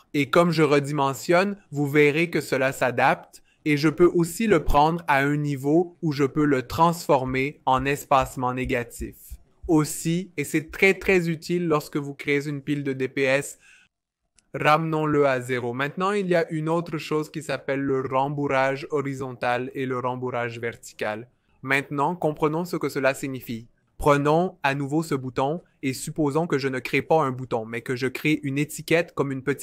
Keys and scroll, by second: 0.6 shift+Up, 0.8 shift+Up, 1.0 shift+Up, 14.7 0, 15.2 Return, 21.1 typing, 23.5 typing, 27.3 alt+super+b.